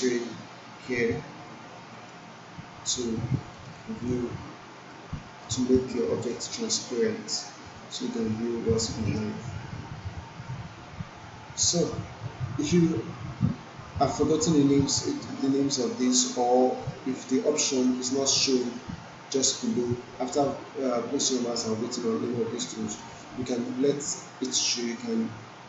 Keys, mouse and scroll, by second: 1.9 click, 2.9-3.5 alt+right click, 3.7 alt+middle click, 5.1 alt+middle click, 6.3-9.4 drag.